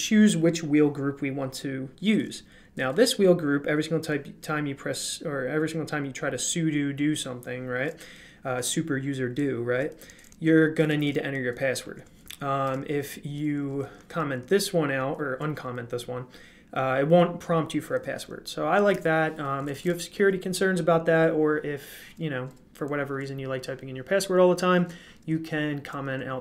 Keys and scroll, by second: 2.1-3.1 typing, 10.0-14.3 typing, 17.4 typing, 18.7-19.8 typing.